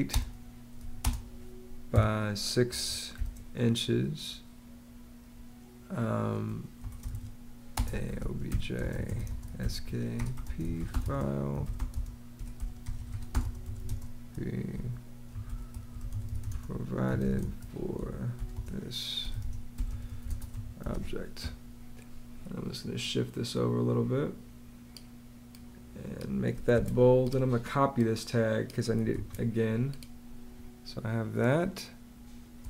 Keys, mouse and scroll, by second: 0.0-1.8 typing, 3.0 ', 6.6 Return, 6.9-20.9 typing, 20.7 click, 26.6 super+b, 29.0 super+c, 31.5 space.